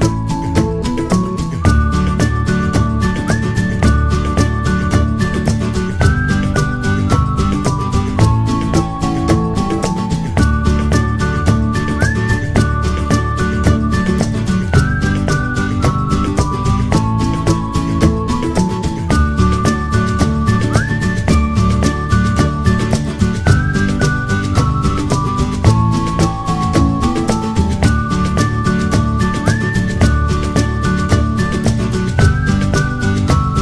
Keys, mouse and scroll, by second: 3.5 click.